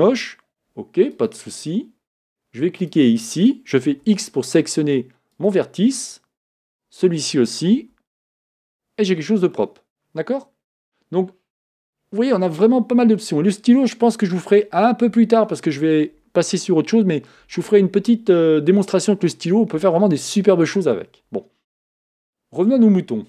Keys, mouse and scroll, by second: 1.1 Escape, 1.1 click, 2.8 click, 4.0 x, 6.7 click, 7.8 x, 9.6-13.5 middle drag, 22.6 click.